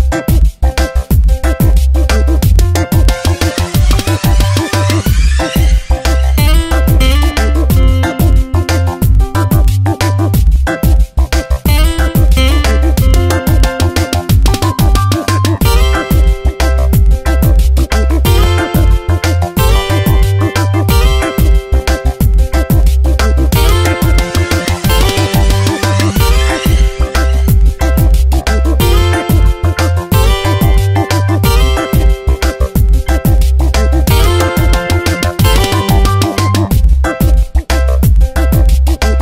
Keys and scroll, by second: 0.8 space, 5.1 a, 6.1 Down, 6.8 space, 9.2 Down, 10.4 p, 16.8 space, 20.9 space, 24.8 space, 28.6 space.